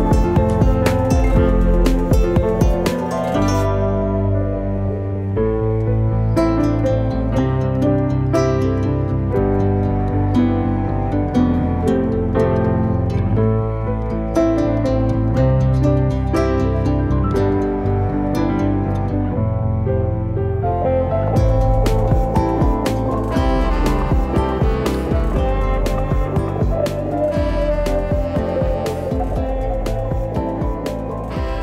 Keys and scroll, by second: 5.0 space, 6.7 F10, 10.0-10.8 typing, 12.6 space, 21.0 space.